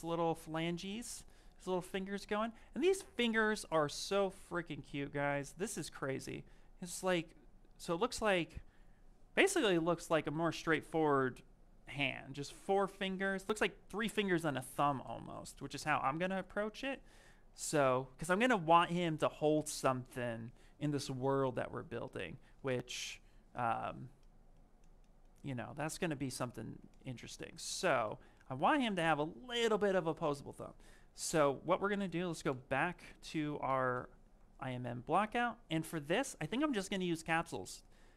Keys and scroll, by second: 31.8 b, 32.1 i.